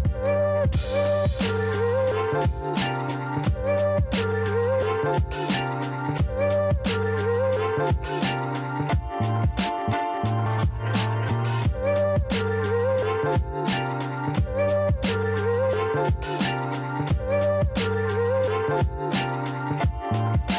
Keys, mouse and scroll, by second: 0.2-1.0 scroll down 2, 1.4 x, 4.2 scroll down 1, 6.9 drag, 8.3 click, 9.1-9.6 scroll up 1, 9.6 click, 10.7 alt+shift+click, 11.9 KP_1, 13.2-15.1 shift+middle drag, 15.1 e.